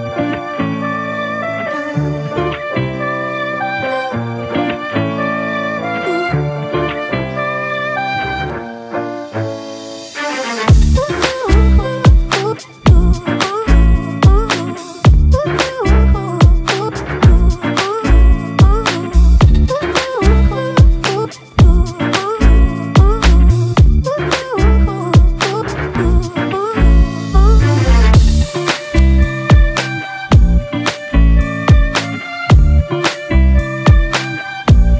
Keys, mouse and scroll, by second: 24.7 double click.